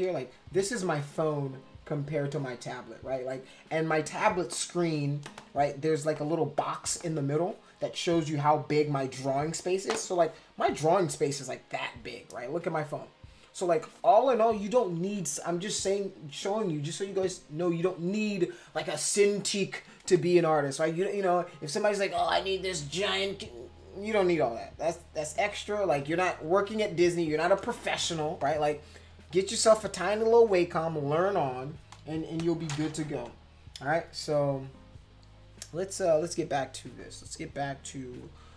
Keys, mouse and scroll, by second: 32.7 Down.